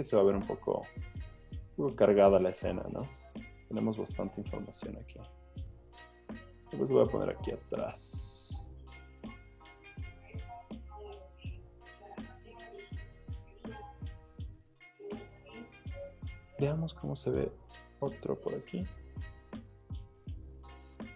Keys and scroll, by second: 13.8 Return, 15.2 z, 18.5 v.